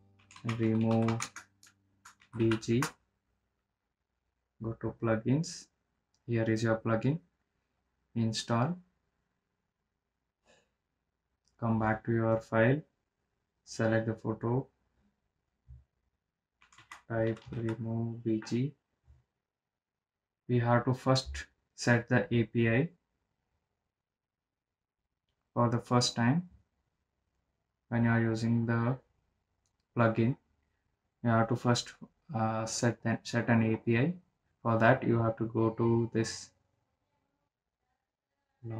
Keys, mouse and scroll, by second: 1.8-4.8 typing, 6.5 click, 9.2 click, 13.1 click, 18.3-20.2 typing, 22.1 click, 22.5 click, 23.1 right click, 27.9 right click, 28.3-33.4 drag, 37.3 click, 37.4 ctrl+v.